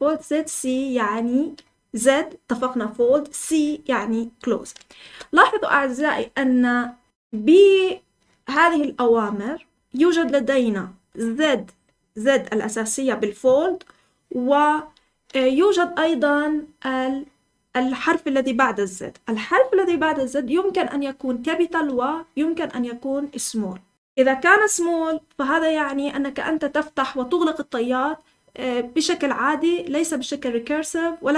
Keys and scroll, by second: 5.0 Escape, 5.4 k, 6.1 j.